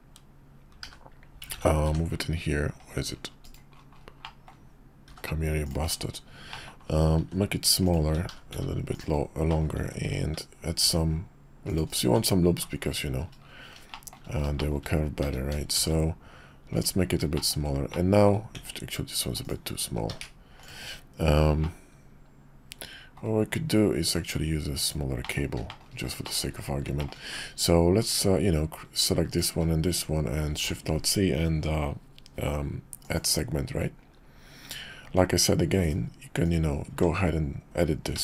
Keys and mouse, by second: 0.8 h, 1.5 ctrl+z, 1.8 g, 4.2 drag, 5.0 g, 6.5 click, 7.2 s, 8.0 s, 9.5 click, 9.8 Tab, 10.8 ctrl+r, 12.0 Tab, 13.9 shift+click, 14.6 shift+click, 15.2 s, 17.3 shift+click, 17.9 click, 18.5 s, 19.8 s, 21.6-23.2 drag, 24.0 s, 25.2 middle click, 25.7 shift+middle drag, 26.2 shift+click, 27.0 shift+click, 29.3 shift+click, 30.5 alt+shift+c, 36.4 click, 36.9 Tab, 38.1 a.